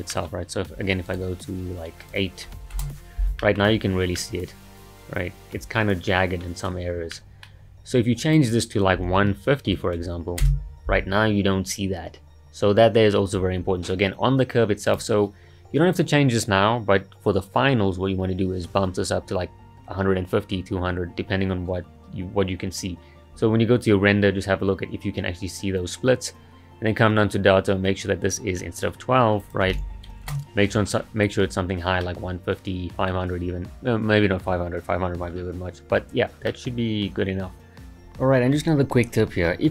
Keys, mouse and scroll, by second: 0.1 middle click, 1.1 click, 2.0-3.4 drag, 3.4-8.2 middle drag, 8.2-11.2 drag, 14.9 click, 29.4-32.0 drag, 32.0-35.0 middle drag, 36.5-38.0 middle drag.